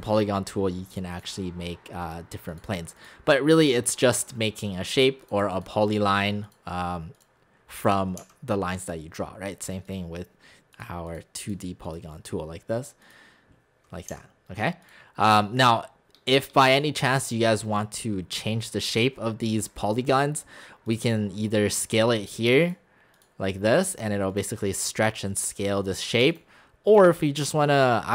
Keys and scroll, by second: 8.2 x, 14.1 x.